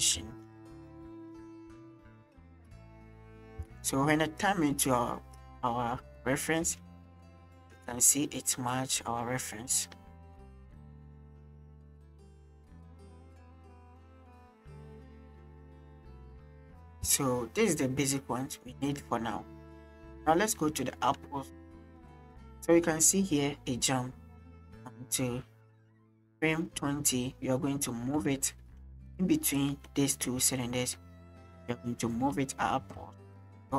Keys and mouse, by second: 3.6 space, 4.4-5.4 drag, 6.2 click, 6.6 space, 7.3 space, 7.8 space, 17.0 space, 18.0 click, 20.9 shift+drag, 21.5 click, 21.6-26.2 right drag, 27.9 middle click, 28.3 shift+middle click, 28.6 middle drag, 29.7 middle click, 30.8 middle drag, 32.2 Right, 32.8 Left.